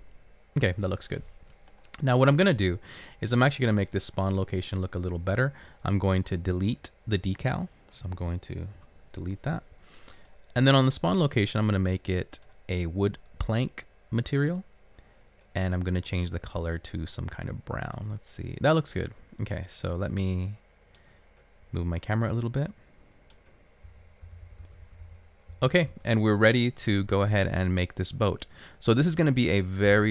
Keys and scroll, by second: 8.9 Delete, 24.0-25.0 typing.